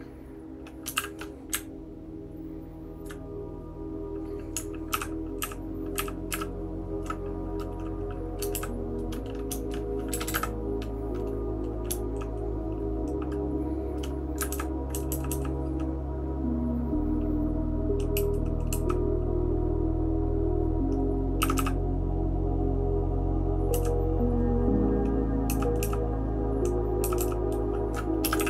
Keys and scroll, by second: 0.9 shift+g, 1.5 Up, 2.0-3.0 Up, 6.3 ctrl+7, 6.3 ctrl+^, 14.5 shift+[, 14.9 shift+[, 15.1 shift+[, 15.3 shift+[, 18.1 shift+], 18.7 shift+], 21.4 shift+], 21.5 shift+], 23.7 {, 25.5 }, 25.8 }, 27.0 }, 27.2 }, 28.2 space, 28.3 e.